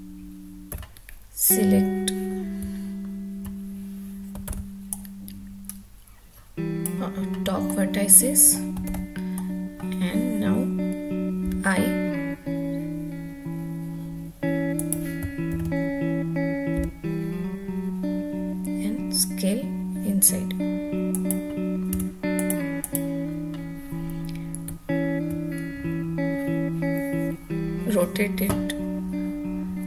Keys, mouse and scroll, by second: 0.7 1, 2.6 `, 4.4 alt+z, 4.9-6.9 drag, 7.7 middle click, 8.8 alt+z, 9.3 middle click, 11.4 i, 14.7 click, 15.5 ctrl+z, 16.7 i, 21.1 click, 21.9 Tab, 22.4 click, 22.8 click, 24.6 `.